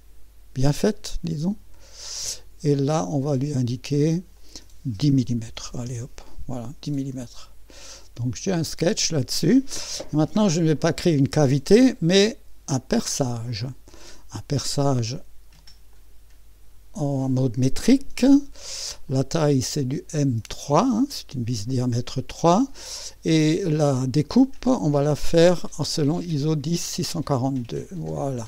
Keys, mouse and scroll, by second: 2.4 click, 4.3-5.5 drag, 5.3-6.1 typing, 7.9 click, 7.9 typing, 12.9 click, 14.7 click, 15.9 click, 19.1 click, 20.5 click, 24.3 click, 25.0-27.2 drag, 27.9-28.4 drag.